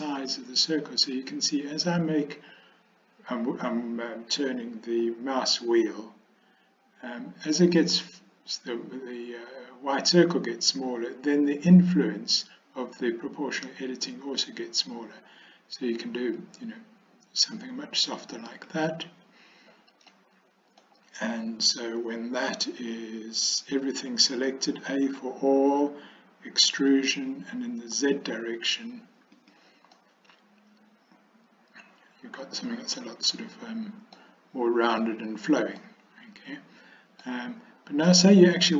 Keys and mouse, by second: 20.2 click, 25.1 a, 26.8 e, 30.1-34.3 middle drag, 36.0-37.3 middle drag.